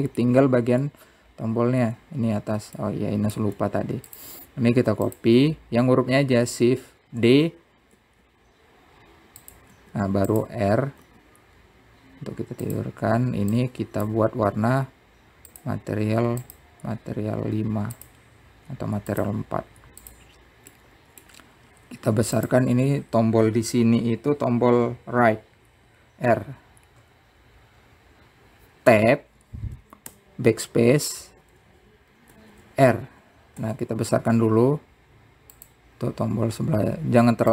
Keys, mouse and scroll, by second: 4.6 middle click, 6.8 click, 7.9-9.0 scroll up 1, 9.0 shift+d, 12.8 r, 15.3-18.2 drag, 20.0-21.0 drag, 22.5-23.6 middle drag, 30.7 Tab, 31.8 BackSpace, 34.1 shift+r, 35.4 Tab, 36.1 s.